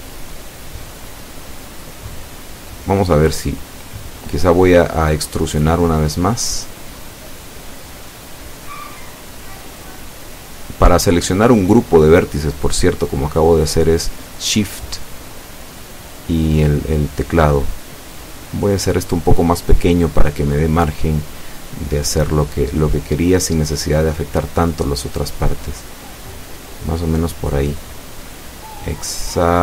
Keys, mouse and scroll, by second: 1.6 s, 2.0 x, 5.1 Escape, 12.2 alt+shift+right click, 12.7 alt+shift+right click, 23.1 o, 25.1 s, 26.6 click, 27.8 right click, 29.3 shift+right click.